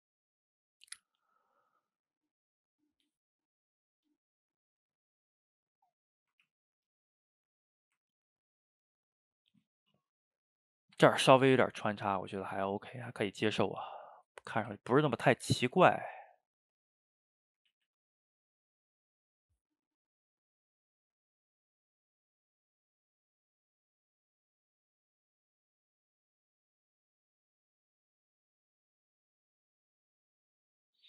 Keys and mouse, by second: 0.2 click, 0.6 middle click, 1.2-4.4 drag, 4.4 middle click, 4.9-6.0 drag, 6.0 middle click, 6.5 ctrl+z, 6.9-8.0 drag, 8.0-10.3 ctrl+middle drag, 10.3-12.5 drag, 12.5-14.6 middle drag, 14.6 f, 15.2-16.2 middle drag, 16.2-17.8 drag, 17.8 ctrl+z, 18.0 ctrl+z, 18.4 click, 19.0-20.4 middle drag, 20.4 click, 20.8-21.8 shift+middle drag, 21.8 click, 22.6 middle click, 23.3 click, 24.0 middle click, 24.5-25.6 drag, 25.6 middle click, 26.3 click, 26.5 middle click, 27.3-29.5 drag, 29.5 middle click, 30.4 click, 30.8 middle click.